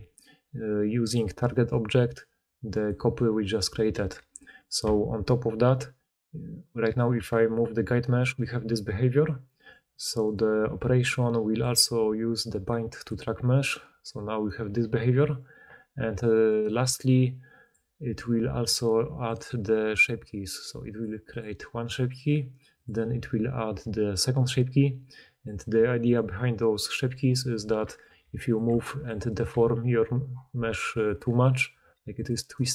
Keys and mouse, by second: 1.1-3.3 middle drag, 3.3 click, 3.6-6.5 middle drag, 3.9 g, 7.1 g, 8.5-9.5 middle drag, 9.5 click, 10.3-12.7 middle drag, 12.7-16.4 drag, 13.8 middle click, 13.8 right click, 14.2 middle click, 14.2 right click, 14.5 g, 17.7-19.2 middle drag, 27.4 Tab, 28.1 r, 28.5 click, 28.6 middle click, 28.6 g, 29.2 click, 29.3-31.3 middle drag, 29.4 g, 31.5 middle click, 31.7 g.